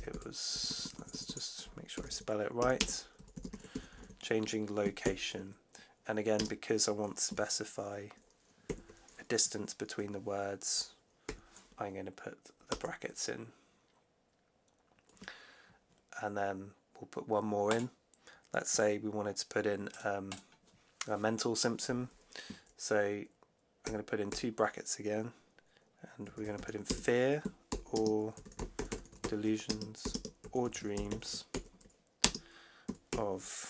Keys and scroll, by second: 0.0-0.5 typing, 1.6-4.9 typing, 6.3 space, 8.6 shift+4, 11.2 8, 12.6 Return, 23.7 shift+9, 26.1-33.6 typing.